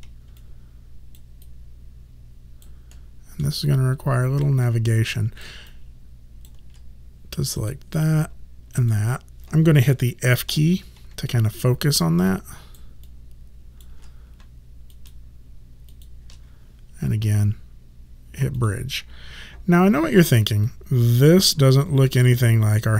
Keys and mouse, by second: 0.4 alt+click, 1.5 alt+right click, 3.0 alt+middle click, 3.7 alt+click, 4.7 alt+right click, 5.7 alt+click, 8.8 shift+click, 10.6 f, 11.4 alt+right click, 13.3 alt+click, 15.0 shift+click, 18.6 click, 20.7 alt+right click, 21.5 alt+click.